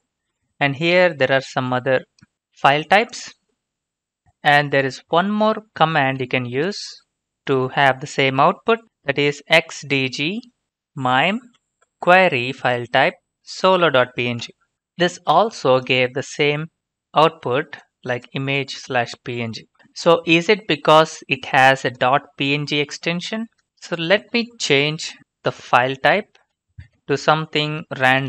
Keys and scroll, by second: 6.3 alt+Tab, 9.4 typing, 11.4 Right, 14.4 Return, 24.9-25.7 typing, 26.5 Right, 26.9-28.2 typing.